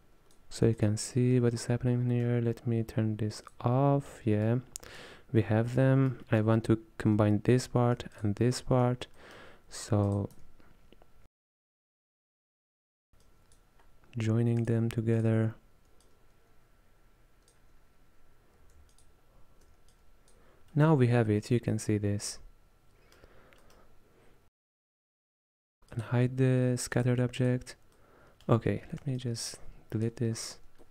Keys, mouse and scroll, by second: 3.5 click, 4.2-8.1 middle drag, 8.5 ctrl+shift+click, 9.3-10.1 middle drag, 10.1 click, 10.8 x, 12.0-13.4 drag, 16.1 drag, 19.3 alt+shift+click, 20.8-25.1 middle drag, 25.1 click, 26.0 click, 27.0 click, 28.0 middle click, 28.9-29.3 scroll down 4, 29.3-30.4 ctrl+drag, 30.4-30.9 scroll up 3.